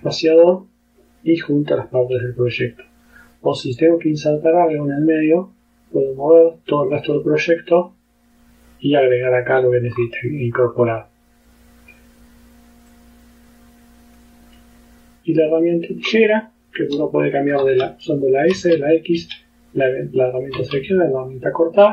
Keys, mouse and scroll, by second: 3.8-7.0 drag, 10.0-10.3 scroll down 2, 10.7 scroll up 2, 13.0-14.4 drag, 15.4 click, 17.7 s, 18.6 x, 19.3 s, 20.7 x.